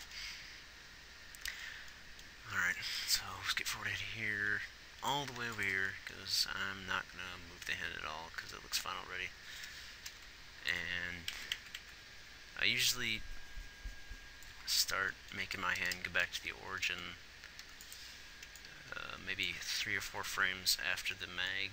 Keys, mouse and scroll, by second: 5.7 ctrl+s, 11.8-12.2 Right, 18.0 ctrl+s, 20.3 Right, 20.4 Right, 20.8 Right.